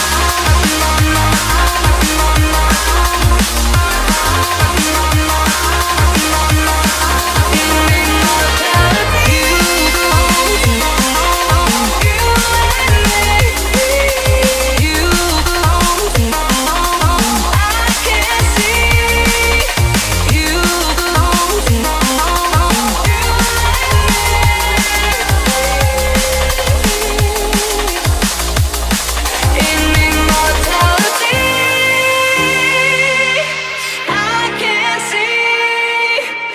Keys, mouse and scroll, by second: 6.2 KP_8, 6.4 KP_0, 7.2 Return, 8.0 click, 8.3 KP_0, 8.7 click, 9.2 KP_0, 10.1 click, 11.4 KP_0, 11.8 click, 12.7 KP_3, 13.2 KP_0, 14.0 click, 14.9 KP_5, 15.2 KP_0, 15.9 Return, 17.3-19.6 drag, 20.1 KP_7, 20.4 KP_0, 20.9 Return, 22.5 click, 23.1 KP_7, 23.3 KP_5, 23.6 KP_0, 23.9 Return, 25.4 click, 31.4-33.4 typing, 34.3-36.1 drag.